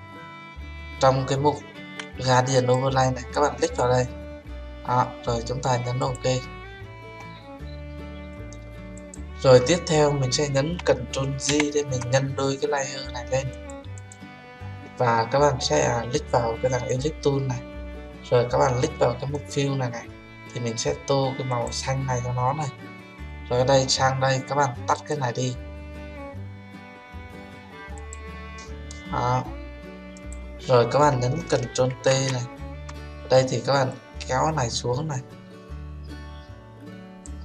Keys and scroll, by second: 11.4 ctrl+j, 31.9 ctrl+t.